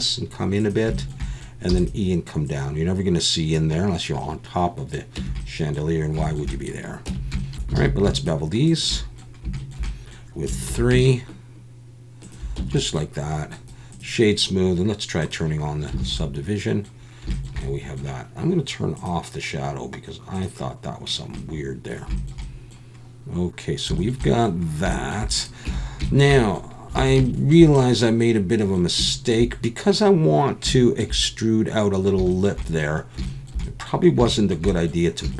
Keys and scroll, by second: 1.7 e, 5.2 Tab, 7.1 Tab, 7.8 alt+a, 10.7 ctrl+b, 12.6 Tab, 16.0 alt+a, 25.7 Tab, 27.0 alt+a.